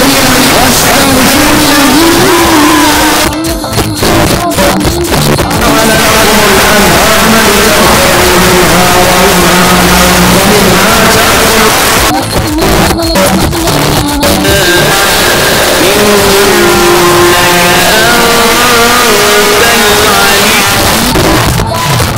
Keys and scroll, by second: 2.9 Page_Down, 11.7 Page_Down, 20.6 Page_Down.